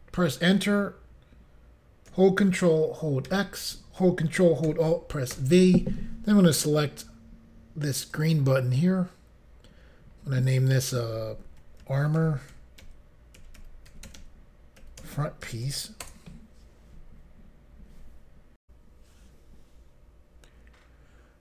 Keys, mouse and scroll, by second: 3.3 ctrl+x, 4.6 ctrl+x, 5.3 ctrl+alt+v, 8.1 click, 10.4 click, 10.7 click, 11.6-15.7 typing, 16.0 Return, 18.6 Pause.